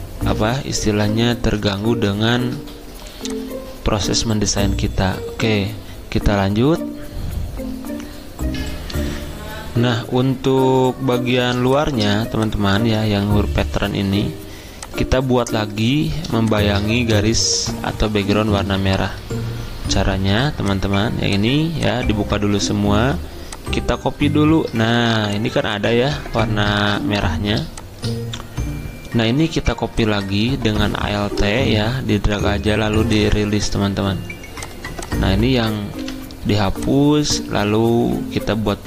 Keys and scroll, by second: 0.4 alt+Tab, 0.8 alt+Tab, 11.2 F10, 13.1 ctrl+z, 20.1 alt+2, 22.4 z, 26.8 ctrl+z, 36.0 Delete, 37.6 d.